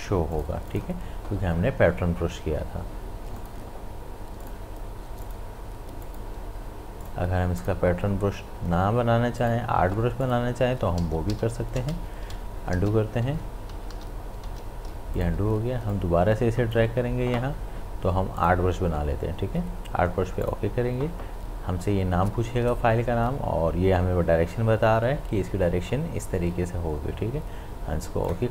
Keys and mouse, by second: 0.3 click, 0.4 click, 3.4 click, 11.0 ctrl+z, 14.9 ctrl+z, 15.2-18.4 drag, 28.3 click.